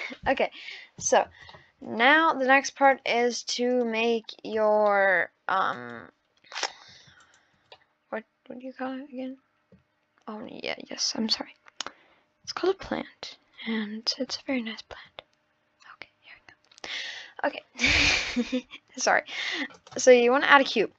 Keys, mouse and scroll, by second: 1.5-3.3 middle drag, 3.3 click, 4.1 click, 4.8-7.4 middle drag, 7.4-7.7 shift+right drag, 7.7-10.2 middle drag, 10.2-12.6 scroll up 1, 14.5 shift+a.